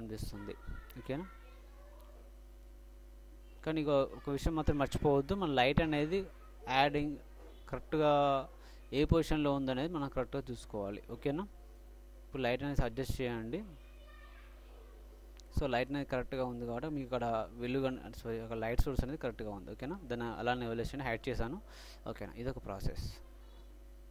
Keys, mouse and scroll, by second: 0.6-2.3 middle drag, 1.2 z, 1.8 z, 3.8-4.3 middle drag, 7.5-9.3 drag, 9.3-10.1 middle drag, 10.1-14.4 drag, 11.8 right click, 12.6-14.0 right drag, 14.4-16.9 middle drag, 16.0-16.8 drag, 16.0-16.8 right drag, 16.9-17.8 drag, 18.1-19.7 drag, 19.1 middle click, 19.1 right click, 19.6-21.0 middle drag, 19.6 right click, 21.0-22.6 drag, 22.2 middle drag, 22.6-24.1 middle drag.